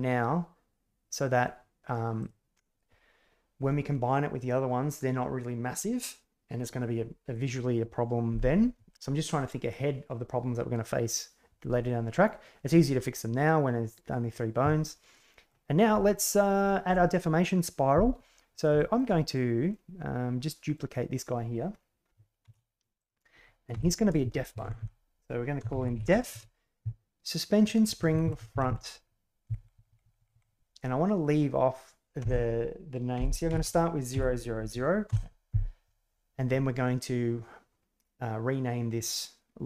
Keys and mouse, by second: 15.1 middle click, 18.7 shift+middle click, 19.2 right click, 19.6-20.7 middle drag, 22.4 shift+d, 23.7 F2, 24.6 Delete, 24.7 Delete, 28.0 Right, 29.5 Right, 29.5 Delete, 29.7 Delete, 30.1 Delete, 33.6 0.